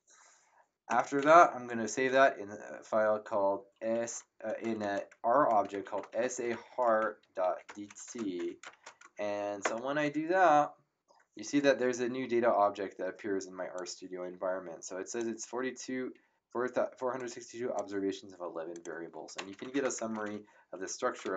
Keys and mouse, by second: 0.9 Home, 1.9 shift+s, 3.9-8.6 typing, 9.6 Return, 13.7 click, 17.1 click, 18.7 click, 19.1-21.3 typing.